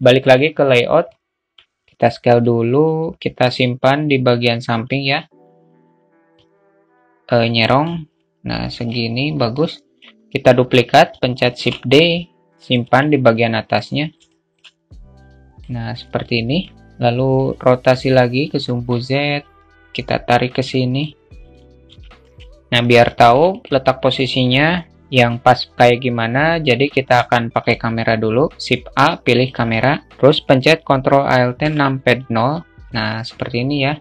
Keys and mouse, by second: 0.0-0.5 drag, 0.7 alt+middle click, 1.6 ctrl+z, 1.6 click, 6.2-7.3 drag, 7.5-8.6 alt+middle drag, 9.3-9.7 alt+middle drag, 11.3 shift+d, 14.0 alt+shift+middle drag, 14.9 click, 15.9 alt+middle click, 17.0-18.7 drag, 19.0-20.6 drag, 22.8 alt+shift+middle click.